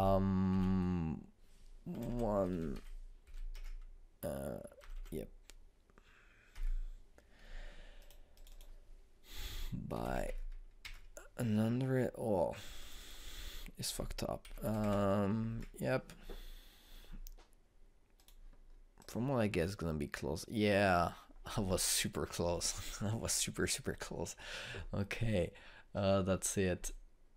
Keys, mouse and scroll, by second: 2.8 BackSpace, 5.7 BackSpace, 8.9 click, 13.7 click, 19.1 click.